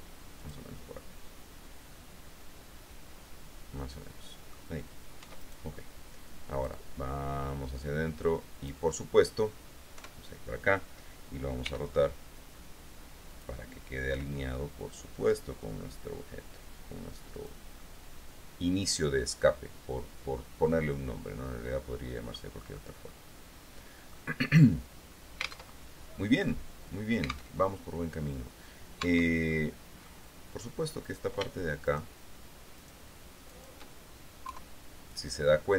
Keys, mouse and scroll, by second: 0.6 click, 1.2-4.9 middle drag, 5.4 Tab, 5.6 right click, 6.7-9.0 drag, 10.2 KP_3, 11.8 r, 13.7-14.8 drag, 14.3 g, 17.5 click, 18.0-22.7 drag, 22.7 middle click, 23.0-24.5 drag, 25.9 alt+Tab, 27.8 alt+Tab, 29.2 Tab, 29.7 click, 31.2 right click, 32.0-33.3 shift+right drag, 33.7 shift+right click, 34.7 KP_3.